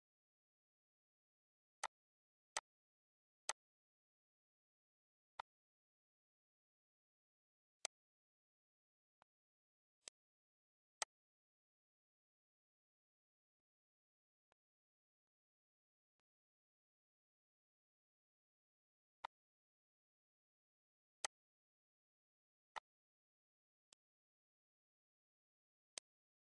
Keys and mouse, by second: 1.7 click, 2.4 click, 3.2 click, 4.9 click, 5.9 ctrl+z, 7.2 click, 8.4 click, 9.2 click, 10.1 click, 12.7 click, 13.6 click, 14.4 click, 15.3 click, 18.8 click, 20.9 click, 23.6 click, 25.8 click.